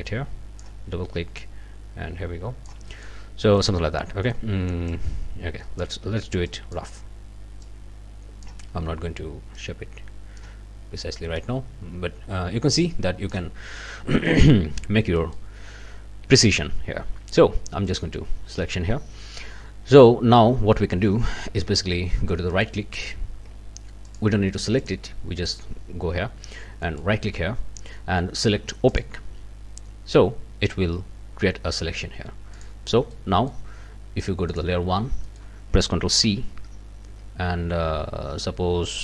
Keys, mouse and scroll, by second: 1.4-2.9 drag, 3.4 scroll down 2, 3.6 middle click, 4.0 scroll up 1, 4.2 middle click, 4.9-6.0 drag, 6.5 click, 7.6-8.6 drag, 9.6-10.6 drag, 11.4-13.5 drag, 13.9 scroll down 2, 14.3 click, 15.2 click, 17.9 click, 22.6 right click, 24.1 click, 24.8 click, 26.8 right click, 28.9 click, 32.5 click, 33.1 click, 34.5 click, 35.2 click, 35.3 scroll up 2, 36.2 ctrl+c.